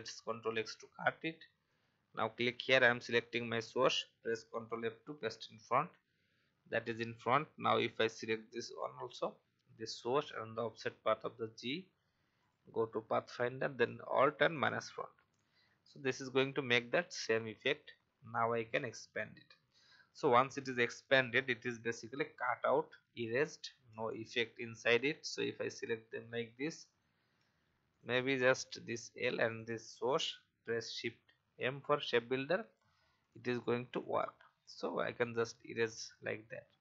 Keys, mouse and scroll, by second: 0.2 ctrl+x, 1.6 click, 5.1 ctrl+f, 8.1 shift+click, 12.3 click, 14.5 alt+click, 17.5 click, 22.9 alt+scroll up 1, 23.8-24.4 alt+scroll down 1, 24.9 click, 26.0-26.3 alt+scroll up 1, 26.8 click, 27.3-27.7 alt+scroll up 1, 27.9 click, 29.4 shift+click, 30.6 shift+m, 33.2 alt+click, 35.0 alt+scroll down 1, 36.0 alt+v, 36.6 alt+scroll down 1.